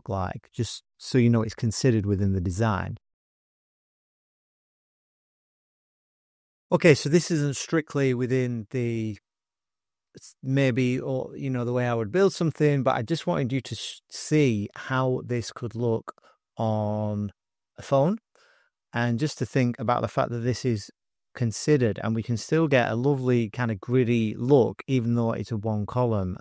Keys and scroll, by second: 3.0-6.9 typing, 20.3 alt+super+Return, 22.6 alt+super+Return.